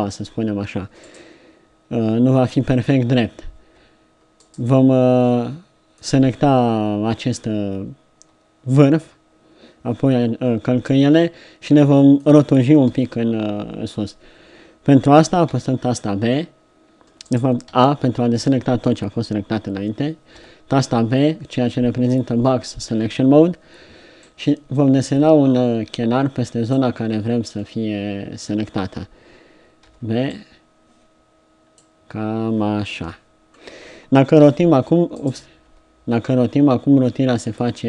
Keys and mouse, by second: 3.6 b, 5.2-7.2 drag, 7.2-11.8 middle drag, 11.8-12.9 drag, 12.9 KP_3, 15.6 b, 17.7 a, 20.4 b, 27.6-29.9 middle drag, 29.9 b, 33.1 KP_3, 34.5 r, 35.6 r.